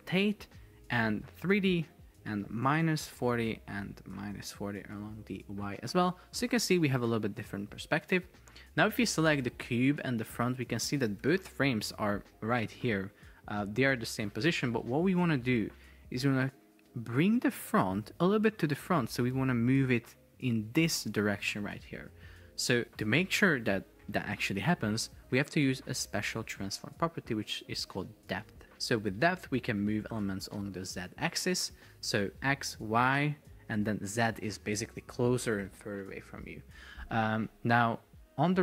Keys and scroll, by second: 4.9 Return, 11.3 shift+super+4, 12.2 Escape, 17.1 shift+super+4, 18.3 space, 19.1 Escape.